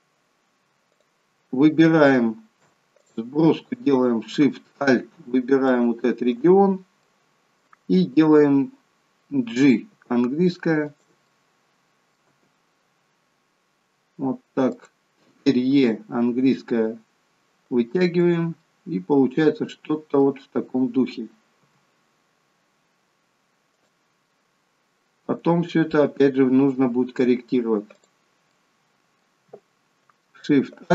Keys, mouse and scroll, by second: 0.9 click, 3.0 click, 5.7 alt+shift+click, 7.0 middle click, 9.8 g, 11.3 middle click, 12.2 g, 15.7 e, 18.6 middle click, 21.6 g, 24.2 middle click, 26.6-27.2 scroll up 1, 28.0 click, 28.5 middle click, 28.5 scroll up 1.